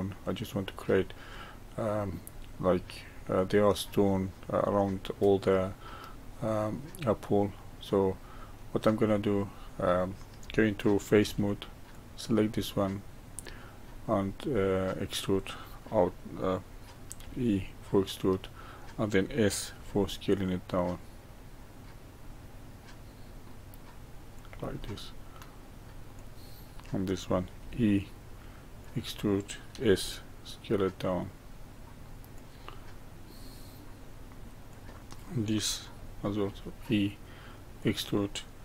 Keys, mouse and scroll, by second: 0.6-3.6 middle drag, 6.2-11.2 middle drag, 11.2 3, 11.9 click, 12.5-13.9 middle drag, 13.9-14.5 scroll up 1, 14.5-17.2 middle drag, 17.2 e, 19.7 s, 24.8-26.1 middle drag, 26.1 click, 27.6 e, 29.7 s, 32.7-34.7 middle drag, 34.7 click, 36.4 e.